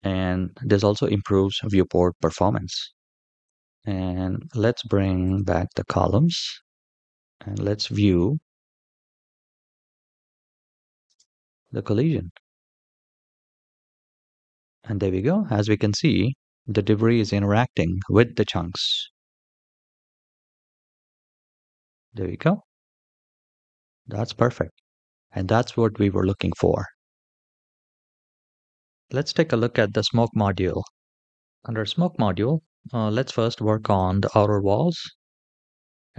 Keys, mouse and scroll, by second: 3.2 click, 5.0 click, 6.2 middle click, 7.2 shift+middle click, 7.9 scroll up 1, 8.4 middle click, 9.0 scroll up 1, 9.8-10.3 shift+middle drag, 10.8 space, 13.8-15.2 scroll up 4, 28.6 shift+middle click, 28.6 scroll down 2, 28.7 click, 30.7 click, 35.1 click.